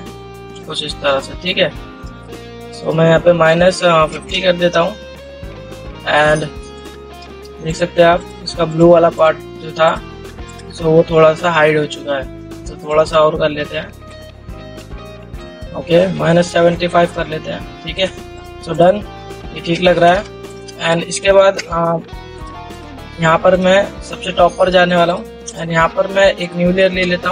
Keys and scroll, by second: 21.5 ctrl+space, 21.8 ctrl+0.